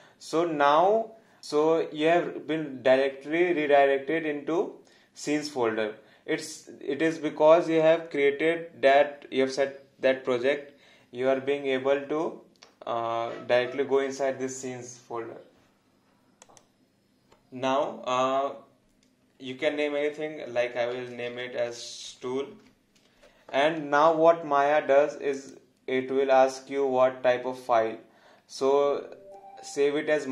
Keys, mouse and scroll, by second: 16.4 click, 20.7-23.0 typing, 25.3 click.